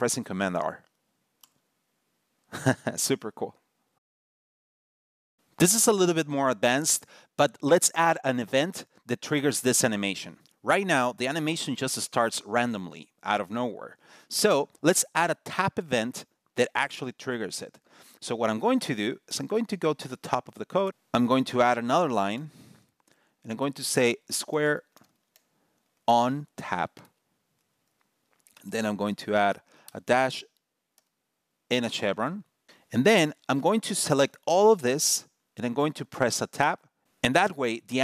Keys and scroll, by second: 1.1 super+r.